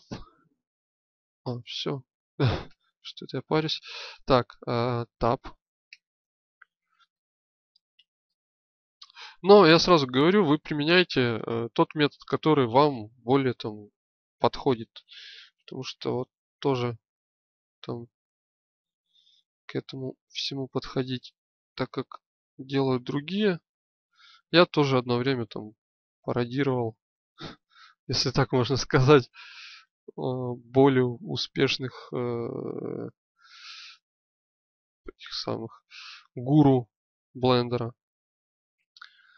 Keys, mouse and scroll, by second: 5.8 Tab, 7.0 middle click, 7.7 middle click, 10.9-12.8 middle drag, 16.6-17.8 alt+shift+drag, 18.8-20.1 middle drag, 20.1 click, 20.4 middle click, 22.6-24.0 middle drag, 25.2-27.0 drag, 31.4 click, 33.4 middle click, 35.2 click, 35.4 middle click, 37.6 middle click, 38.7 middle click.